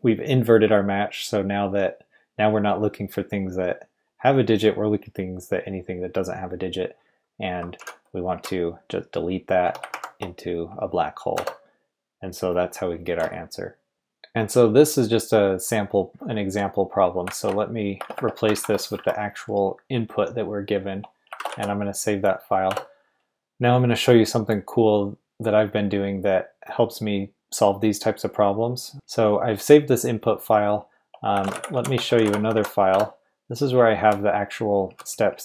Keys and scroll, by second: 7.8-8.3 typing, 9.6 typing, 11.3 Return, 13.9 Escape, 17.3 shift+a, 17.9 BackSpace, 18.1 BackSpace, 18.5 super+v, 18.9 Escape, 21.5 w, 22.7 Return, 31.3-35.4 typing.